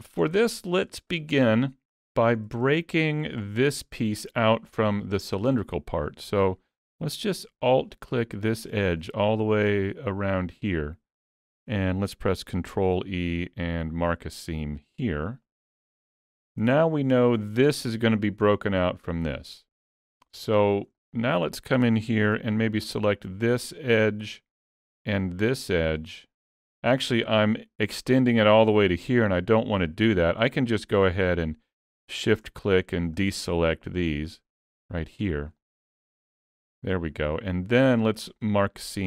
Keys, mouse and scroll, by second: 0.3 scroll down 2, 0.5 shift+middle click, 1.4 middle click, 2.8-3.3 scroll up 3, 3.1 shift+middle click, 3.5 shift+middle click, 6.3 2, 7.9 alt+click, 9.0 middle click, 16.0 shift+middle click, 16.6 alt+a, 17.0 scroll down 3, 17.3 shift+middle click, 20.5 shift+middle click, 21.0 middle click, 23.1 alt+click, 25.2 alt+shift+click, 25.6 middle click, 26.4 scroll up 4, 26.8 shift+middle click, 27.1 middle click, 31.2 shift+click, 32.1 shift+click, 32.8 middle click, 34.2 shift+click, 34.8 shift+click, 35.3-35.7 scroll down 3, 35.6 middle click, 38.1 shift+middle click, 38.5 middle click.